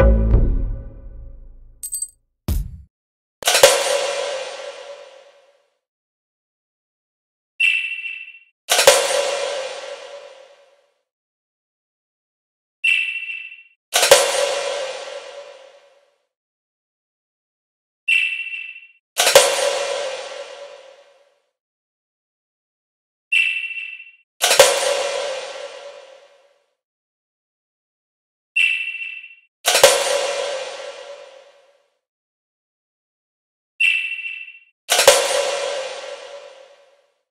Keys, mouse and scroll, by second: 2.3 shift+click, 2.9 click, 6.7 click, 7.8 click, 9.8 click, 11.1 click, 12.2 shift+click, 12.8 click, 15.6 click, 17.3 shift+click, 18.3 click, 21.3 click, 21.6 click, 22.3 click, 24.5 click, 26.7 click, 27.6 click, 30.1 click, 30.5 click, 32.3 click, 34.0 click, 34.4 click, 34.9 click.